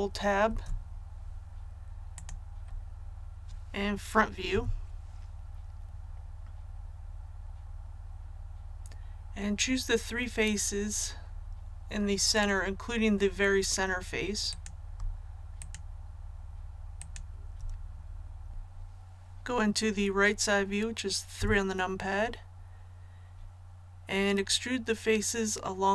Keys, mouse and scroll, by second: 0.4 Tab, 2.1 click, 4.5 KP_1, 14.4 right click, 15.5 shift+right click, 17.0 shift+right click, 18.5 click, 21.4 KP_3.